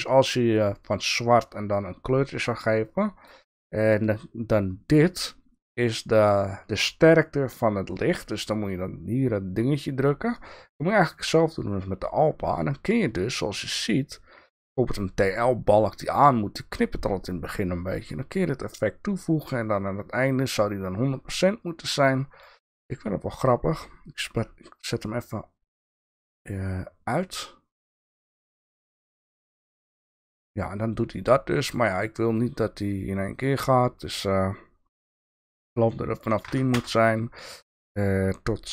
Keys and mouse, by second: 13.2-17.1 drag, 21.6 click, 27.1 click, 28.5 click, 30.3 click, 31.7 click, 32.3 click, 33.4 click, 35.0-37.7 drag, 38.0-38.7 drag.